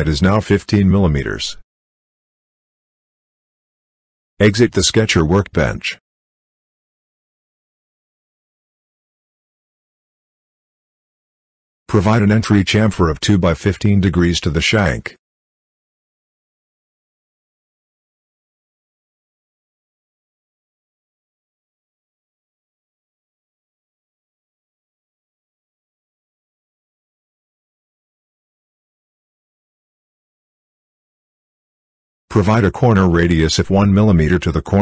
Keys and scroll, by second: 0.0-0.1 typing, 17.6-18.4 typing, 20.6 2.